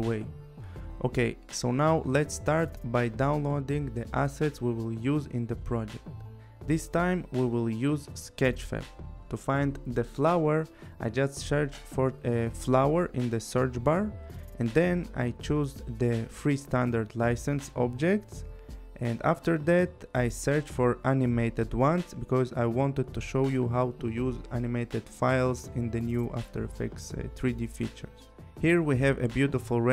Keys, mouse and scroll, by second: 0.5 click, 6.0 click, 8.0-9.5 typing, 9.7 Return, 13.4 click, 14.9 click, 17.1 click, 20.3 click, 24.0 click, 27.9 click.